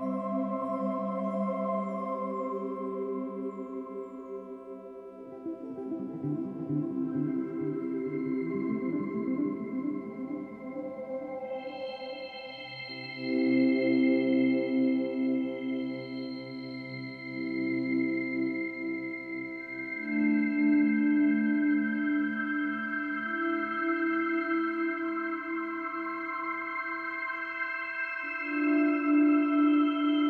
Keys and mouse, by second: 0.3-2.0 ctrl+alt+drag, 3.3-10.4 drag, 11.9-12.9 ctrl+alt+drag, 18.2 i, 19.7 click, 25.8 ctrl+z, 26.4 ctrl+z, 27.6-28.2 drag, 28.8-30.2 drag.